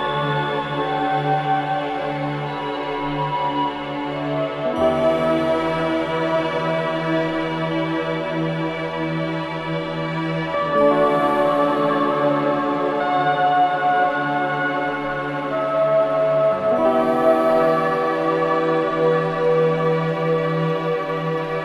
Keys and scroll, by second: 0.5 4, 3.5 3, 3.8 ], 6.8 ], 11.2 Escape, 16.6 4, 19.6 2, 19.9 ].